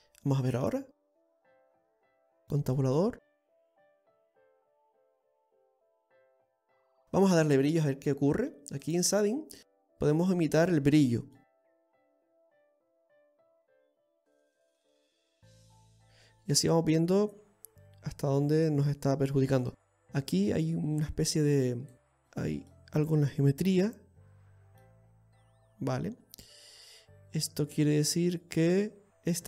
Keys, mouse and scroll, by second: 0.1 scroll down 1, 0.4 middle click, 1.8 click, 2.2-3.0 scroll up 1, 3.0 Tab, 3.4 middle click, 9.5 click, 11.7-12.1 scroll down 2, 12.1 middle click, 22.1 shift+middle click, 22.1 scroll up 1, 22.6-22.9 scroll up 3, 22.9 middle click, 23.6 right click, 24.4 Tab, 24.8-25.5 scroll up 1, 25.5 middle click.